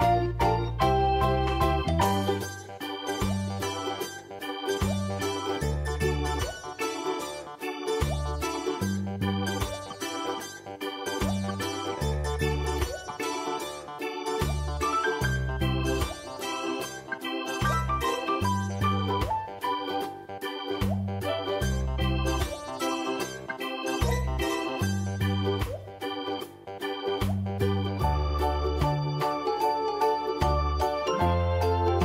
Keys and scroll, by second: 0.6 Delete, 1.9 ctrl+0, 4.8 v, 8.0 ctrl+t, 23.3 e, 30.3 ctrl+t.